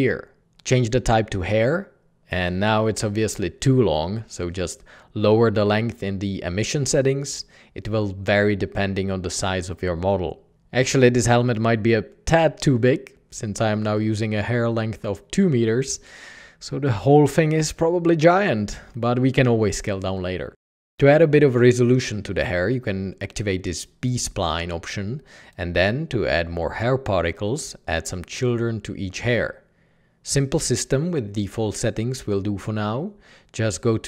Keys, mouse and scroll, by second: 6.1 Tab, 6.2 Return, 6.3 Return.